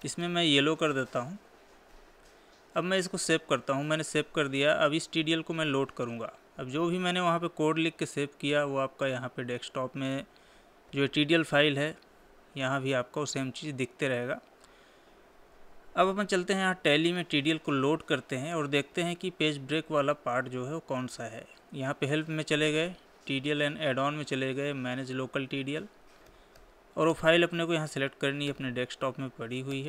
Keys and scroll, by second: 3.6 ctrl+s, 18.3 Escape, 28.4 Up, 29.6 Down.